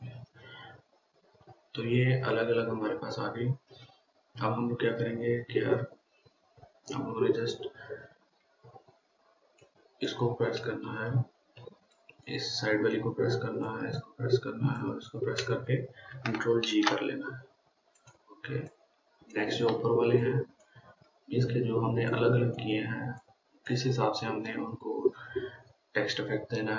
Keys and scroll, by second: 17.1 ctrl+g.